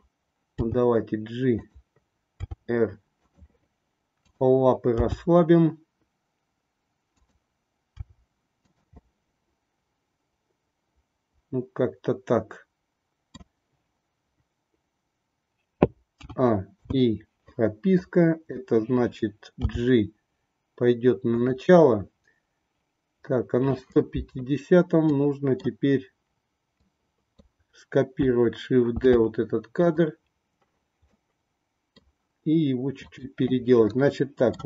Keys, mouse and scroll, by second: 0.6 g, 2.4 r, 4.2-5.5 drag, 5.5 g, 8.0 r, 9.2-13.4 middle drag, 16.1 a, 16.8 i, 17.9 click, 19.7 g, 25.1 middle click, 26.8 click, 28.9 shift+d, 31.0-32.0 middle drag, 33.0-34.3 drag, 34.3 middle click.